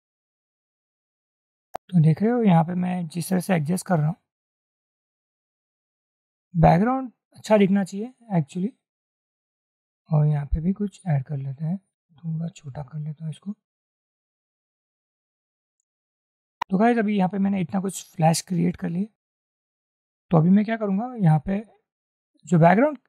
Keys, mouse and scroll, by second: 1.4 double click, 2.5 shift+click, 13.0 shift+click, 18.3 shift+click.